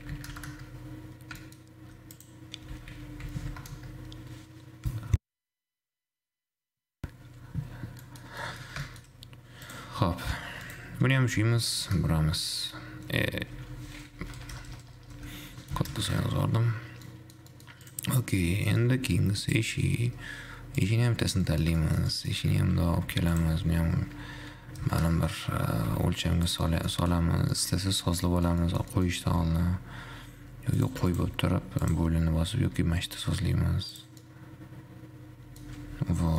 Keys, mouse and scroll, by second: 1.4-1.7 scroll down 1, 1.7 shift+middle click, 2.3 click, 2.8 r, 7.9-8.2 scroll down 2, 8.2-9.3 middle drag, 9.3-9.9 scroll up 1, 9.9 click, 10.9 click, 11.7 r, 17.2-18.2 middle drag, 18.2 click, 18.4-19.7 middle drag, 19.7-21.7 drag, 21.7-22.7 middle drag, 22.7 g, 23.8 r, 25.8-26.2 scroll up 2, 26.2 g, 27.2 shift+middle click, 27.4-27.7 scroll up 4, 27.7-29.6 middle drag, 29.6 g, 31.3 shift+click, 32.2-34.3 drag, 34.4-36.2 middle drag, 36.2 scroll down 2.